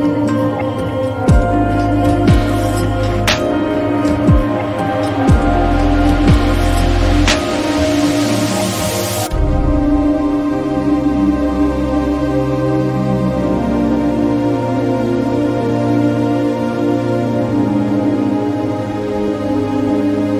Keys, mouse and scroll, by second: 1.0-6.8 shift+drag, 6.8-15.9 shift+drag, 15.9-20.3 shift+drag.